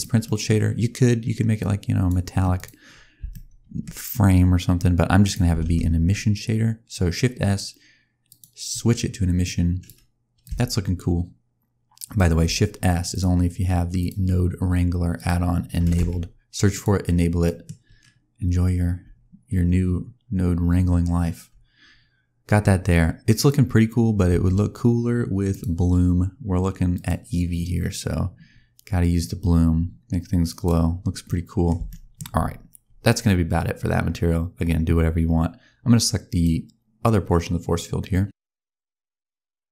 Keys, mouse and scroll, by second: 0.1 middle click, 0.5-1.5 scroll up 2, 1.5 click, 2.4 click, 2.7-3.2 scroll up 4, 3.2 shift+middle click, 3.9 scroll down 1, 5.1 click, 5.5 shift+s, 9.3 click, 10.3 click, 13.0 click, 17.2 scroll down 1, 17.3 middle click, 17.8-18.1 scroll down 1, 18.9 scroll down 1, 19.6-21.5 scroll down 1, 23.3 click, 24.1 scroll down 1, 25.8 click, 26.9 click, 29.1 click, 30.9 scroll down 1, 31.2 middle click, 31.8 shift+middle click, 34.3-36.0 scroll up 1, 36.2 click, 38.7 click, 39.2 click.